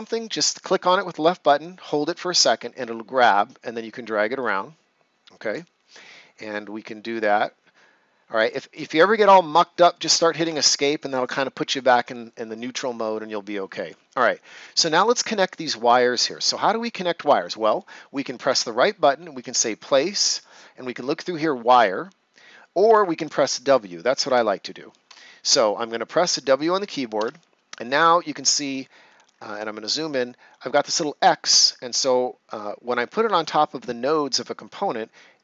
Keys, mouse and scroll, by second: 1.6 click, 18.4 right click, 24.2 Escape, 27.1 w, 31.0-31.5 ctrl+scroll up 1.